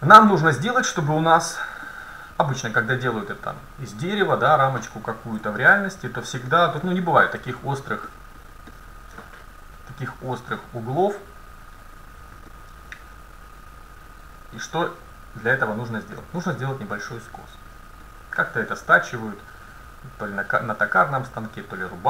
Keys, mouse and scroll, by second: 1.6-4.1 middle drag, 6.9-8.0 middle drag, 8.8-10.8 scroll down 1, 10.8 middle click, 12.0-14.2 middle drag, 16.7-17.8 middle drag, 17.8-18.3 scroll down 1, 18.3-19.0 scroll down 1, 19.0-20.7 middle drag.